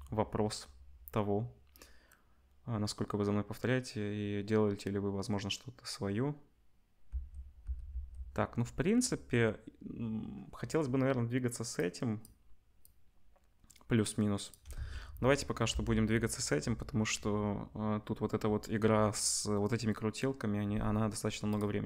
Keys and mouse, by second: 7.0 space, 7.6 space, 11.8-21.5 drag, 14.7 ctrl+s, 21.5-21.8 middle drag.